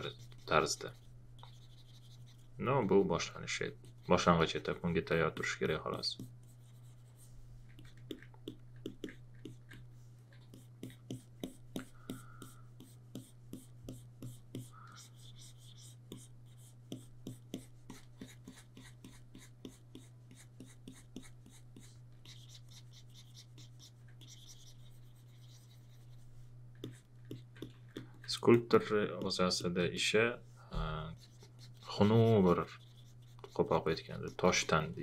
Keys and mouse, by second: 9.4 alt+click, 27.3 alt+click, 28.5 alt+click.